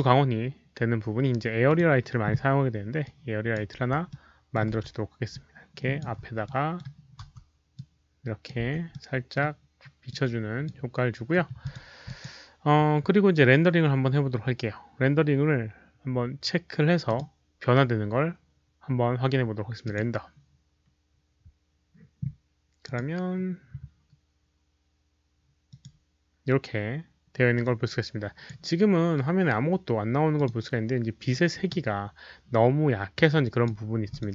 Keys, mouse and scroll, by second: 1.6 click, 3.0-3.5 drag, 3.6-5.9 typing, 4.0-4.5 middle drag, 5.2-5.9 drag, 5.3 middle click, 6.4-6.7 middle drag, 7.2-8.2 typing, 7.7-8.4 drag, 7.7 middle click, 8.8-9.3 middle drag, 10.0-10.6 drag, 11.6 click, 12.0 drag, 14.6-15.3 typing, 14.8 click, 14.8 middle click, 16.1 click, 16.7-17.5 typing, 17.0 middle click, 17.0 click, 19.8 click, 23.0 click, 25.6 click, 27.6 click, 28.8-29.1 scroll down 1, 30.3 click, 31.2-31.6 drag, 31.9 middle click, 32.2 click, 33.1-33.6 drag, 34.0 click.